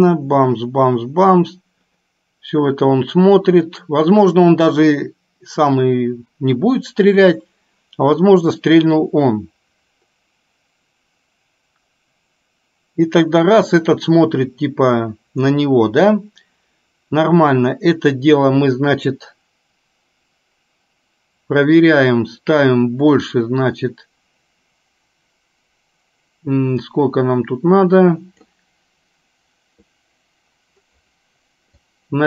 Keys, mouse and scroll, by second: 23.5-28.5 drag, 32.0-32.2 drag.